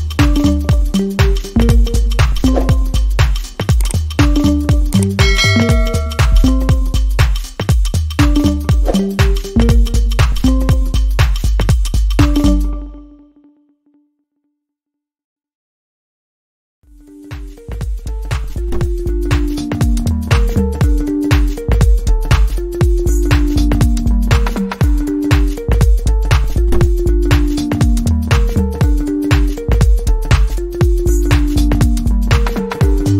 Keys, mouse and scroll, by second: 0.6 double click, 12.3 shift+click, 13.4 shift+click, 14.3 Return, 24.4 double click, 31.1 alt+click.